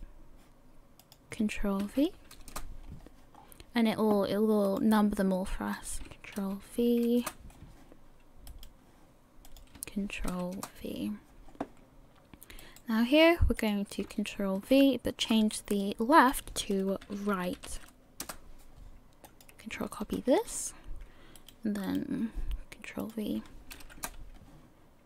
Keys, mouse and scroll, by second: 0.0 right click, 1.0 click, 3.4 scroll down 4, 4.1-4.8 scroll down 1, 4.8 right click, 5.7 click, 8.7 right click, 9.4 click, 12.8 right click, 13.6 click, 19.2 click, 20.3 ctrl+c, 22.0 right click, 23.0 click.